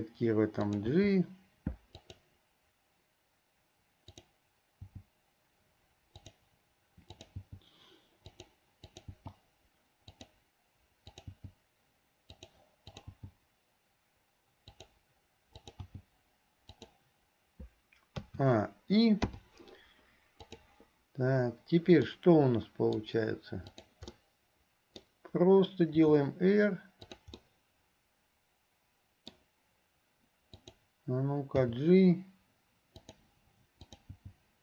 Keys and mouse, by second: 0.7 click, 1.1 g, 4.1 click, 7.2 click, 7.7 g, 11.2 click, 11.6 g, 13.1 click, 15.7 click, 18.4 a, 19.4 i, 20.6 click, 22.2-23.2 middle drag, 23.9 click, 24.4 click, 24.4 right click, 26.0 r, 27.7-29.6 drag, 27.7-29.6 right drag, 30.6 click, 33.9 click.